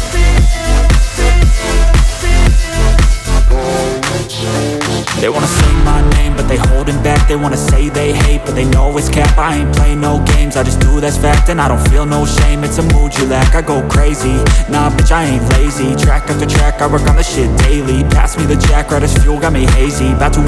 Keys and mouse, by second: 4.4 shift+d, 5.4 s, 8.9 shift+d, 10.9 s, 11.3 middle click, 11.6-13.2 drag, 12.5 s, 13.2 middle click, 13.7-14.7 drag, 14.3 s, 14.7 middle click, 15.0 click, 15.6 s, 15.9-20.4 middle drag.